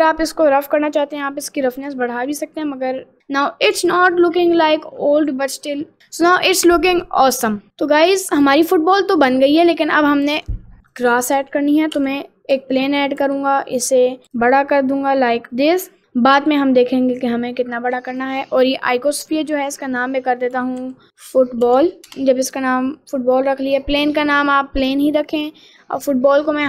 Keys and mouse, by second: 1.6 click, 2.8 middle click, 3.2 middle click, 3.8 ctrl+z, 4.4 middle click, 5.2 middle click, 6.0 middle click, 6.4 middle click, 7.7 middle click, 8.0 middle click, 8.6 middle click, 9.3 middle click, 10.3 shift+a, 12.0 s, 14.2 s, 14.9 middle click, 18.1 click, 19.5 click, 19.6-22.2 drag, 22.0 l, 23.1 middle click.